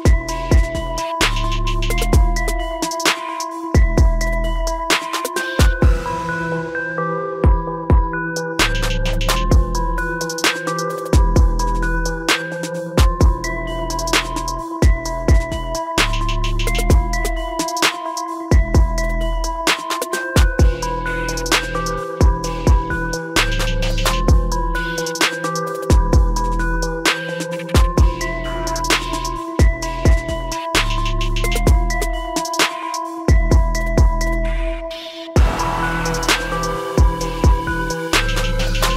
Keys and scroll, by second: 4.4 ctrl+a, 16.7 ctrl+t, 34.0 ctrl+e.